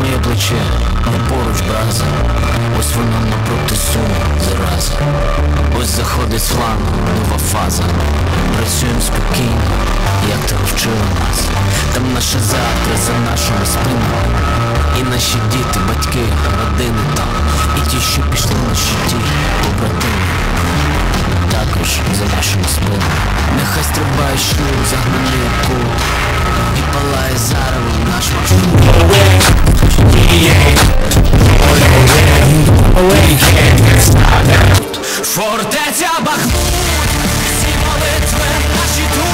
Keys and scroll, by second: 35.1 Page_Down.